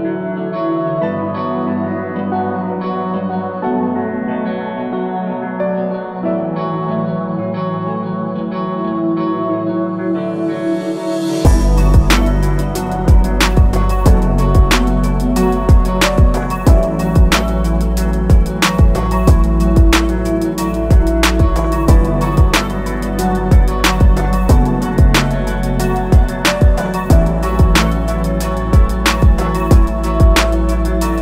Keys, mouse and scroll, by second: 17.3 click, 22.8 click, 25.0 alt+click, 27.5 click, 29.8 click.